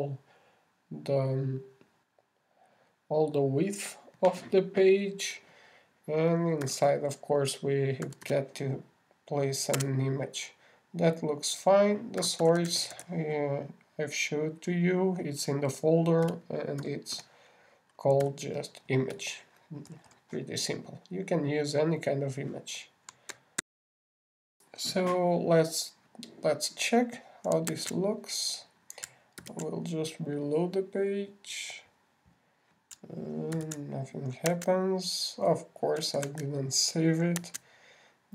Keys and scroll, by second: 25.0 shift+super+i, 29.1 super+Tab, 30.8 super+r, 34.9 super+r, 35.9 super+Tab, 37.6 super+s.